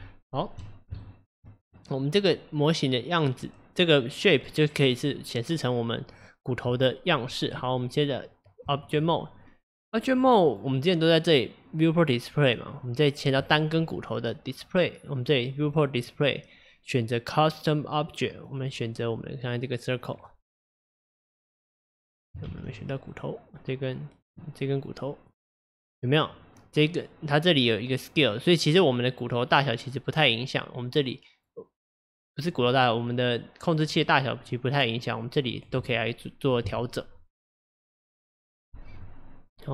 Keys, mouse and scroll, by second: 1.1 shift+middle click, 1.8 click, 6.1 click, 7.6 Tab, 10.2 click, 10.5 click, 13.4 click, 15.7-18.5 drag, 22.5 ctrl+z, 22.8 click, 23.1 click, 24.3 click, 28.3-31.3 drag, 35.6-38.6 drag.